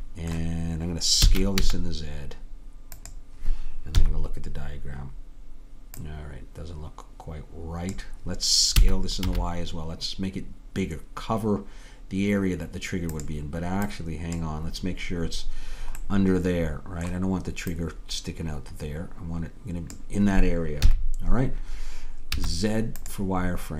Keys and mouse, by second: 1.3 s, 4.1 KP_3, 6.1-7.9 drag, 8.9 s, 13.9-16.1 drag, 16.1 middle click, 17.8-19.9 drag, 20.9 KP_3, 22.4 z.